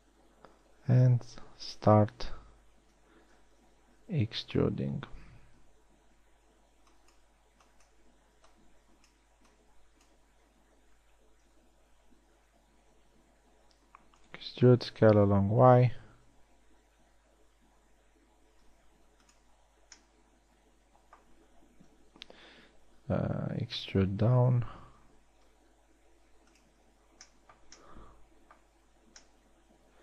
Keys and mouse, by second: 2.3-5.0 typing, 6.4 b, 8.1 b, 8.9 b, 9.9 b, 12.1 KP_3, 14.3 e, 15.7 s, 20.3 z, 22.8 KP_1, 24.5 e, 27.5 z, 29.3 z.